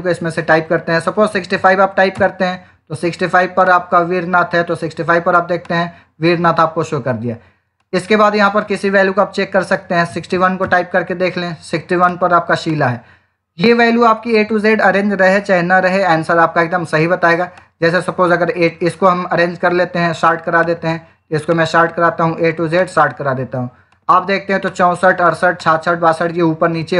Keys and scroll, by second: 1.0-1.9 typing, 2.0 Return, 9.7-10.7 typing.